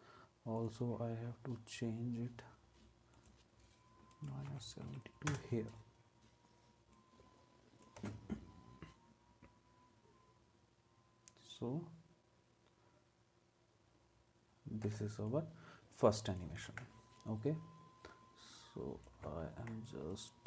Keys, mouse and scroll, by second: 4.2-5.4 typing, 8.0 space, 14.8 space, 16.7 ctrl+s.